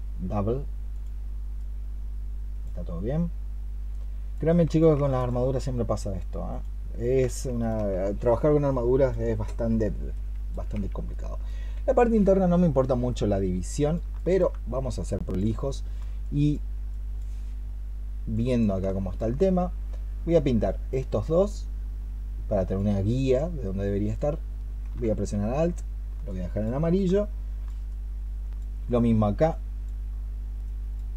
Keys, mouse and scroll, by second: 5.0 alt+click, 7.3 alt+click, 14.0 alt+click, 15.5 alt+click, 20.5 alt+click, 26.1 alt+click, 27.0 alt+click.